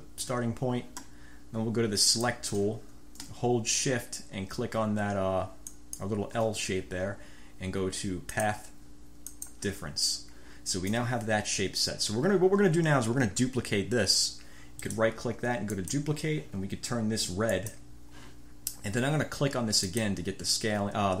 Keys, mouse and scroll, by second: 2.2 click, 5.8 shift+click, 8.5 click, 9.4 click, 14.9 right click, 15.9 click, 17.7 click, 19.9 click.